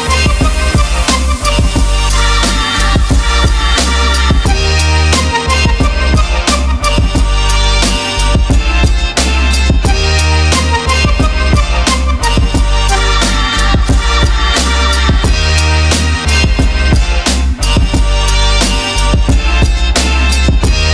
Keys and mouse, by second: 0.5-2.0 drag, 3.3-3.7 drag, 4.3 click, 7.3 click, 7.6 click, 9.8-12.3 drag, 12.4 ctrl+middle click, 13.1 ctrl+middle click, 14.0 middle click, 14.9-16.3 drag, 17.1 ctrl+middle click, 17.8 ctrl+middle click, 18.0 middle click, 18.7 click, 19.1 shift+a.